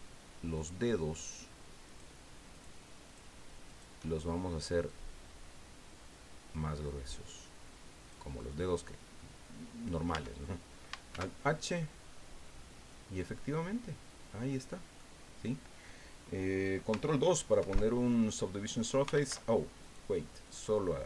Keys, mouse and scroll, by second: 0.6 shift+right click, 1.1 shift+right click, 1.9 shift+right click, 2.5 shift+right click, 3.1 shift+right click, 3.7 shift+right click, 4.9-8.3 drag, 8.4-9.4 drag, 10.1 Tab, 11.1 alt+h, 11.8-15.1 drag, 15.1-18.1 middle drag, 17.6 ctrl+2, 19.1 ctrl+z, 19.8 right click, 20.4 right click.